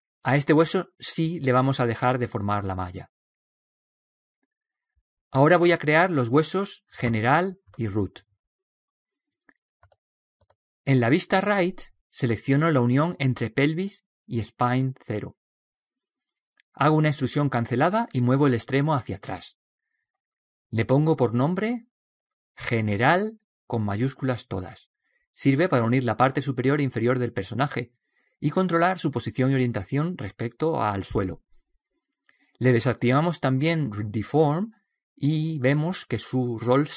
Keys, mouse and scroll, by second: 1.3 click, 12.9 right click, 17.5 e, 19.0-20.3 drag, 20.3 middle click, 21.0 right click, 21.7 middle click, 22.2 click, 33.0 click, 35.0-36.9 drag.